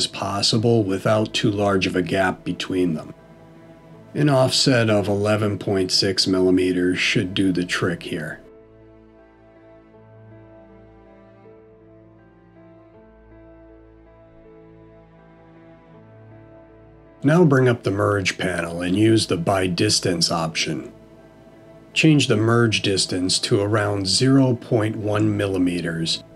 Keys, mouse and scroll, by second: 4.7 middle click, 7.0-7.8 scroll up 1, 7.8 middle click, 11.4-11.8 scroll down 2, 12.6 middle click, 12.6-13.2 scroll down 1, 19.2 alt+m, 24.8 click.